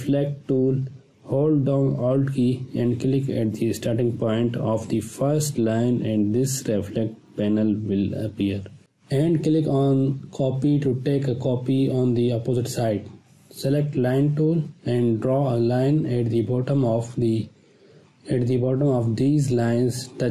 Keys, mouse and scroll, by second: 3.1-5.2 drag, 16.5-17.4 shift+drag, 19.3 space, 19.8-20.1 ctrl+drag.